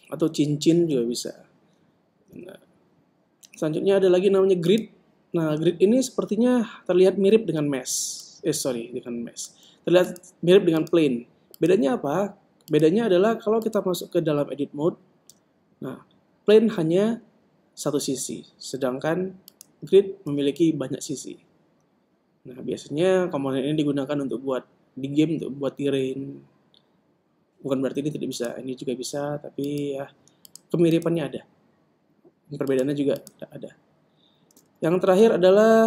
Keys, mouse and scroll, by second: 2.7 shift+a, 6.8-8.4 middle drag, 8.8 click, 10.6-16.1 right drag, 15.9 Tab, 19.5 Tab, 20.1-21.9 right drag, 20.9 Tab, 28.4 Tab, 29.0 right click, 33.4-35.6 right drag, 35.3 shift+Tab.